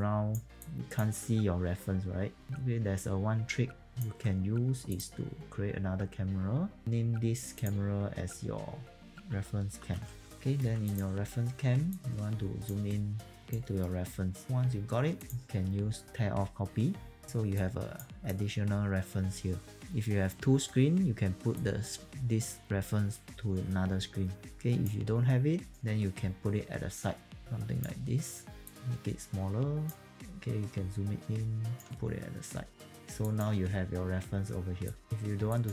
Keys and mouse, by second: 0.6 alt+click, 2.4 alt+click, 4.9 click, 9.0-11.4 typing, 10.3 alt+middle click, 10.8 click, 11.9 alt+click, 12.9 alt+right click, 13.8 alt+middle click, 15.1 click, 17.2 click, 21.5 click, 27.4 click, 30.1 alt+right click, 31.9 click, 33.2 alt+click, 34.8 alt+click.